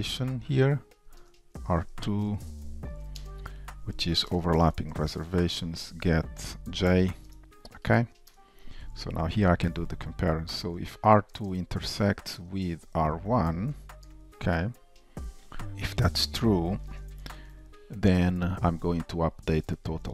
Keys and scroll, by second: 1.2 Return, 4.6 Return, 7.3 shift+super+Return, 9.5 shift+Return, 12.4 Return, 16.2 shift+super+Return.